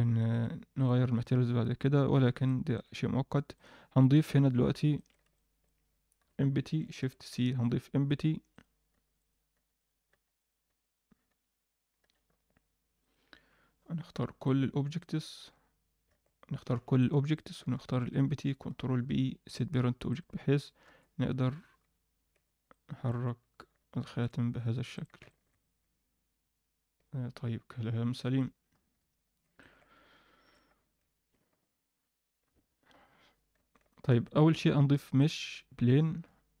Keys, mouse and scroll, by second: 0.8 click, 1.6-2.0 scroll down 2, 2.0-2.7 scroll up 2, 2.4-2.7 middle drag, 3.5 click, 3.5 scroll down 1, 4.2 KP_1, 4.9 shift+middle drag, 5.3 middle click, 6.1 KP_1, 6.9 shift+c, 7.3 shift+a, 8.9 s, 9.5 s, 14.1 b, 16.1 alt+a, 16.7 b, 17.9 shift+click, 18.6 ctrl+p, 20.1 click, 20.4-20.8 scroll down 1, 20.8 g, 22.3 z, 22.6-23.1 middle drag, 23.7 g, 25.2 alt+shift+middle click, 25.6-28.3 alt+middle drag, 28.9 KP_1, 29.5 ctrl+alt+middle drag, 31.1 shift+c, 33.8 shift+c, 34.1 shift+a, 35.6-36.2 scroll down 1, 36.2-36.6 scroll down 1.